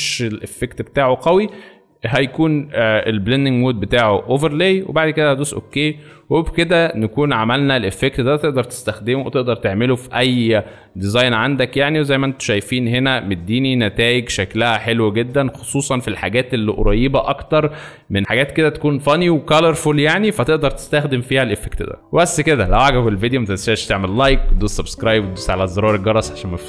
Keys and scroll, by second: 6.4 space, 14.2 alt+space, 15.3 alt+space.